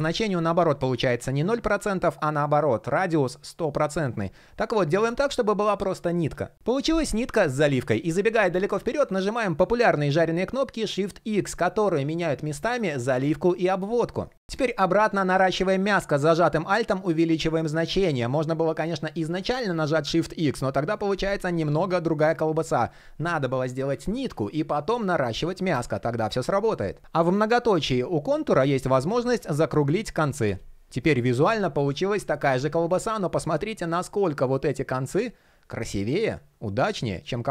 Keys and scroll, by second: 9.3 shift+x, 19.2 shift+x, 23.7 super+z, 25.7 super+z.